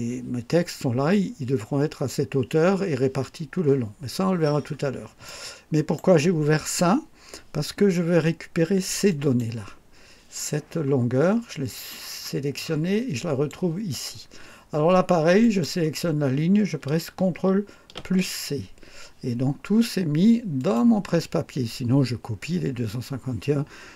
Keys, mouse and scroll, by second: 4.6 scroll down 1, 5.2-6.1 right drag, 9.1 click, 12.2-13.6 drag, 15.4 click, 18.0 ctrl+c, 20.6 click.